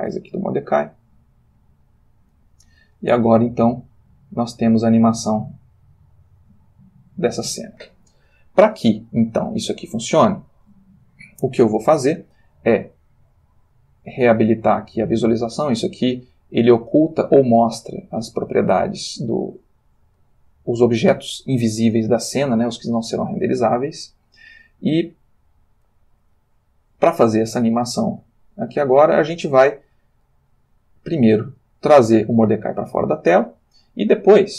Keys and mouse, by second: 1.6 click, 3.3 space, 7.4 Escape, 13.9 click, 15.3 click, 16.3 click, 17.2 click, 18.8 click, 29.7-30.8 drag.